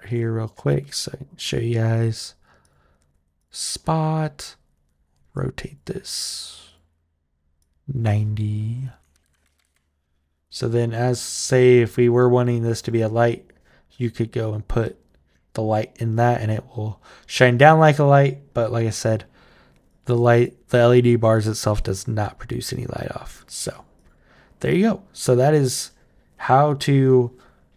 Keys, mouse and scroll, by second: 1.9 click, 2.4 click, 3.2 click, 5.1 click, 6.4 click, 7.4 click, 10.8 click, 12.0-13.2 right drag, 13.8 right click, 14.6-17.7 right drag, 19.7 click, 20.2 click, 20.7 click, 21.1 click, 21.6 click, 22.0 click, 22.8 click, 23.0 click, 23.5 click, 23.7 click, 24.5-26.8 right drag.